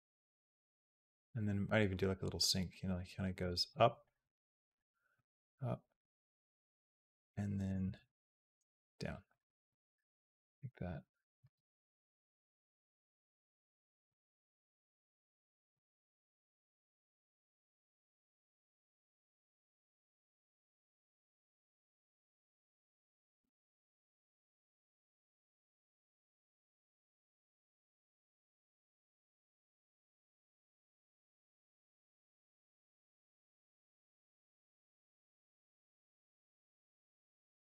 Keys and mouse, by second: 0.2 space, 0.3-3.2 drag, 3.5 click, 3.8 click, 4.0 g, 5.0-7.5 drag, 7.8 g, 10.0-11.4 drag, 11.2 space, 13.0 space, 13.7 click, 15.7 shift+d, 17.5-21.1 drag, 21.1 space.